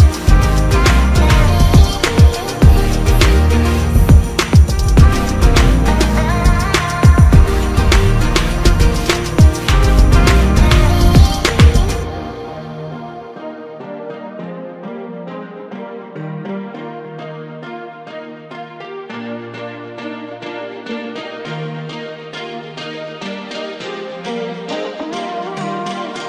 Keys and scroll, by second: 1.3 ctrl+alt+KP_Add, 2.4 typing, 10.6 ctrl+x, 13.3 ctrl+shift+g, 16.6 ctrl+f, 19.9 ctrl+KP_Subtract, 20.8 ctrl+space, 23.1 ctrl+g, 23.2 typing, 26.1 ctrl+KP_Add.